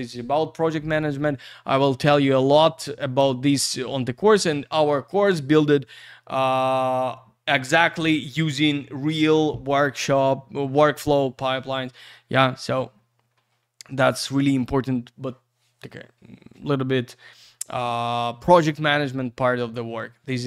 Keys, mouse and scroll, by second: 3.2 Page_Down, 4.6 scroll up 1, 11.8-12.5 scroll down 1, 12.9-13.7 scroll up 1, 13.7-14.2 scroll down 1.